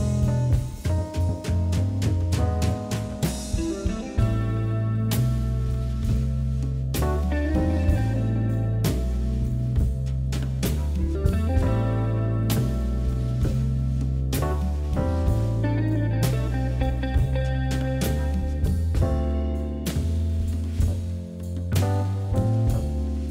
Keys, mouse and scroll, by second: 1.1 g, 3.3 KP_7, 3.8 scroll down 1, 4.0-4.5 shift+middle drag, 4.5 shift+z, 5.4 shift+d, 9.5 KP_1, 10.4 shift+z, 10.6 KP_Divide, 12.0 KP_Divide, 12.5-13.6 middle drag, 13.6 KP_7, 14.2 shift+z, 14.5 click, 14.9 drag, 15.6 shift+d, 18.5-19.1 scroll down 1, 19.1 shift+d, 21.1 shift+drag, 21.5 shift+click, 22.0 KP_1, 22.6 shift+click, 23.2 alt+x.